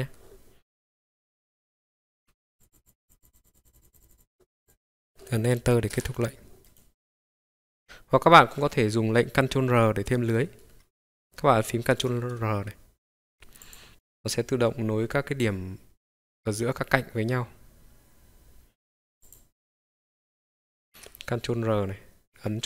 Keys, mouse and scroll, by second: 0.0 ctrl+right click, 2.2 k, 6.7 right click, 7.6 click, 8.1-8.6 scroll down 2, 9.1 scroll down 1, 9.9-10.8 scroll down 3, 10.8 scroll up 1, 11.8 ctrl+r, 19.2 click, 20.7 click, 20.7 ctrl+r.